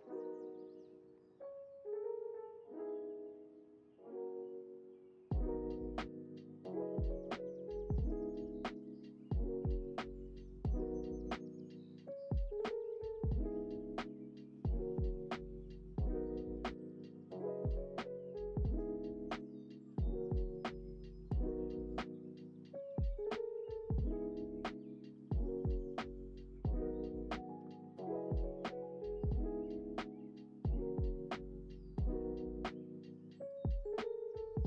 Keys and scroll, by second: 0.3 u, 6.3 ctrl+z, 15.0 space, 17.3 alt+z, 27.8 x.